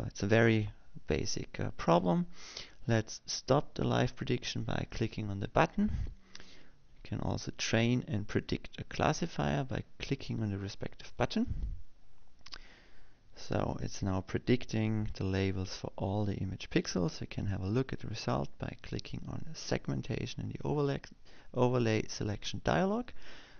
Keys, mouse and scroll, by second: 6.3 click, 12.9 click, 20.5 click.